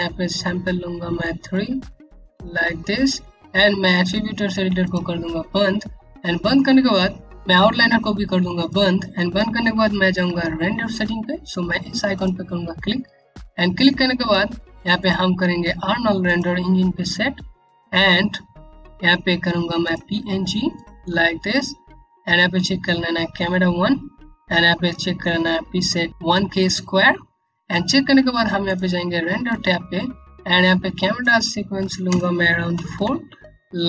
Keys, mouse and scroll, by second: 1.0 click, 1.8 KP_3, 2.0 KP_Enter, 4.3 click, 5.5-6.9 scroll down 1, 8.1 click, 11.7 click, 19.3 click, 20.8-23.7 scroll down 1, 28.2 click, 31.6 BackSpace, 32.3 KP_4, 32.6 KP_Enter.